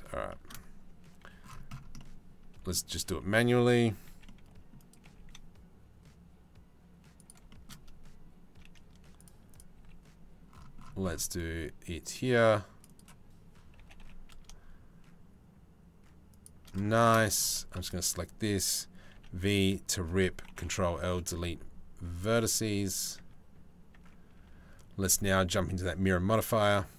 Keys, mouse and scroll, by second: 0.1 click, 0.8 c, 3.7 c, 4.7 g, 9.4 c, 13.4 g, 16.4 shift+middle click, 17.1 2, 17.5 alt+click, 18.8 v, 20.2 ctrl+l, 20.7 Delete, 22.3 a, 22.8 Tab, 23.5 Tab, 24.0 Tab, 24.7-26.4 drag.